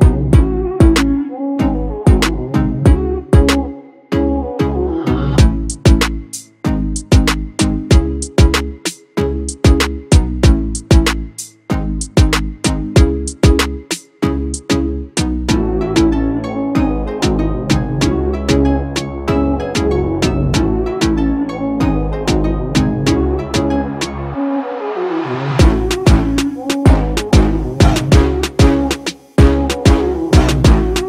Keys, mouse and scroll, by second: 0.1 ctrl+j, 2.9 ctrl+j, 6.1 ctrl+j, 9.1 ctrl+j, 23.9 Return.